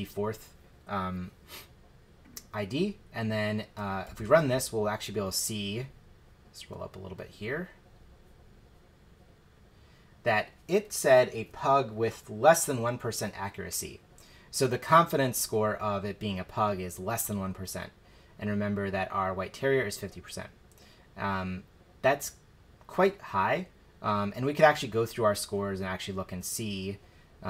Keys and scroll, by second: 4.0 shift+Return.